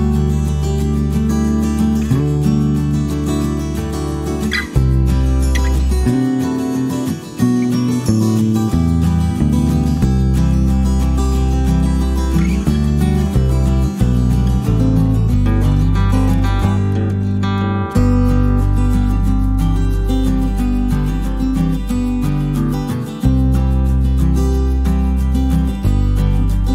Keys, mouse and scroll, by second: 2.0 click, 7.1 click, 10.6 click, 11.5 click, 12.6 click, 13.2 click, 13.7 click, 14.3 click, 15.8 middle click, 20.4 click, 23.1 click.